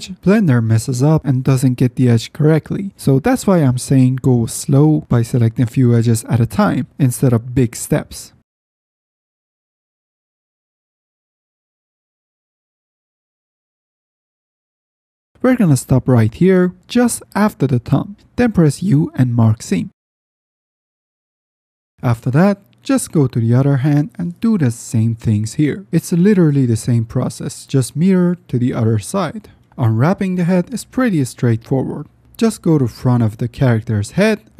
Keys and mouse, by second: 0.4 ctrl+shift+click, 0.7 ctrl+z, 1.1 click, 2.6 ctrl+shift+z, 3.3 shift+click, 3.4 middle click, 3.8 ctrl+shift+click, 4.3 middle click, 4.5 middle click, 5.5 click, 5.5 middle click, 5.5 right click, 7.1 ctrl+shift+z, 7.4 click, 7.4 middle click, 7.4 right click, 7.9 ctrl+shift+click, 8.4 click, 8.4 middle click, 8.4 right click, 8.6 ctrl+z, 10.4 ctrl+z, 11.1-12.2 drag, 12.2-12.7 middle drag, 13.6-14.2 shift+drag, 18.3 u, 21.9 F10, 22.3 middle drag, 22.6 middle click, 23.6 ctrl+shift+drag, 25.5 KP_Decimal, 25.7-26.1 middle drag, 26.4 middle click, 26.7 middle click, 27.1 middle drag, 27.6-28.0 middle drag, 28.0 u, 28.9 middle drag, 29.2 middle drag, 29.4 middle click, 29.6 F10, 30.3 shift+click, 30.6 middle click, 32.4 shift+middle click, 33.1 shift+middle drag, 33.8 middle click, 34.2 shift+middle click.